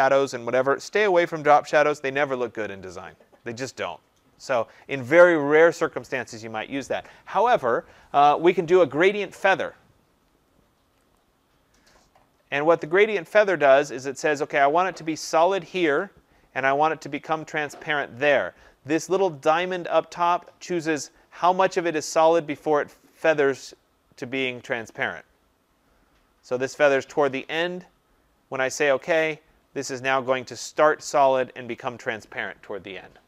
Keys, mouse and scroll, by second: 11.1 click, 26.8 click, 28.9 click.